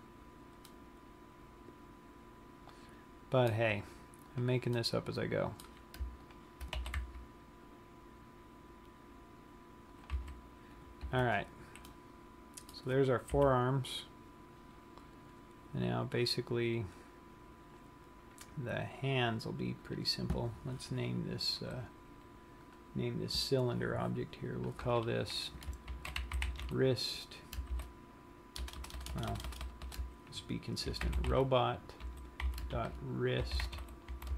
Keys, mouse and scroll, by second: 1.0 middle click, 4.5 click, 5.0 middle click, 6.5 shift+click, 7.1 g, 10.3 click, 10.4 a, 10.9 scroll down 1, 11.5 Tab, 12.3 middle click, 13.4 KP_3, 14.9-15.2 scroll down 1, 15.8-16.8 scroll up 7, 17.3-18.0 scroll up 1, 18.3-20.4 scroll down 1, 20.4 click, 23.2 click, 25.1 click, 29.5 BackSpace, 29.8 BackSpace, 30.4 BackSpace.